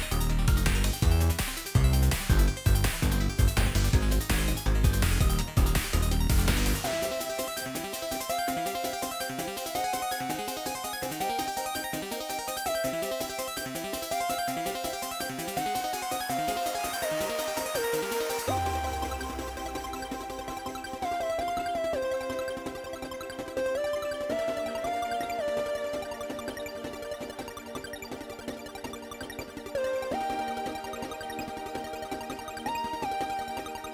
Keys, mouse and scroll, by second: 1.1 ctrl+j, 2.0 ctrl+click, 4.7 ctrl+j, 6.2 ctrl+click, 8.1 ctrl+j, 8.6 ctrl+j, 8.8 ctrl+click.